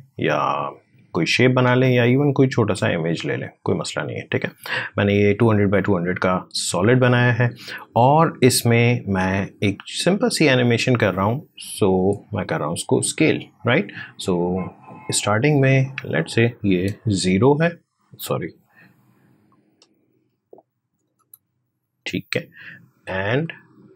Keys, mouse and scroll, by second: 1.1-5.4 drag, 8.5 click, 15.3 click, 19.2 click, 20.9 0, 21.7-23.9 drag.